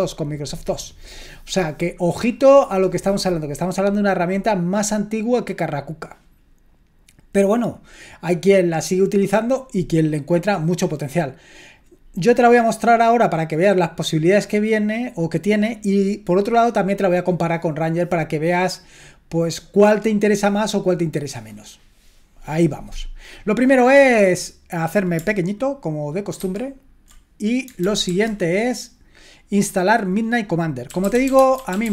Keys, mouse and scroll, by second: 26.4 ctrl+1, 27.8 super+l, 28.0 super+l, 30.6-31.9 typing.